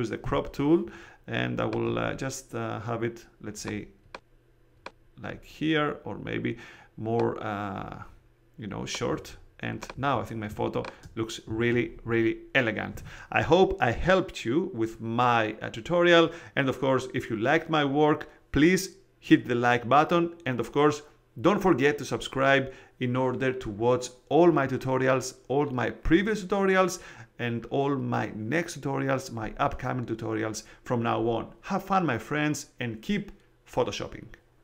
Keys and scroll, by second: 0.2 c, 10.4 space.